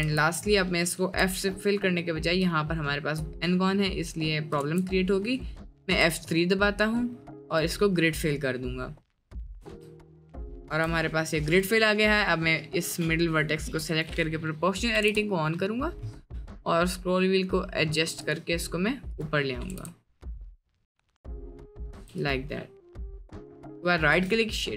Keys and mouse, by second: 0.1 s, 1.1 f, 3.7-4.6 middle drag, 4.7 ctrl+z, 5.0-5.6 middle drag, 5.9 F3, 9.6 Tab, 10.0-10.6 middle drag, 10.8 Tab, 11.5 click, 12.9 click, 13.9 click, 15.0 g, 19.2 click, 19.6 g, 21.9 Tab, 22.9 drag, 23.9 right click, 24.6 click.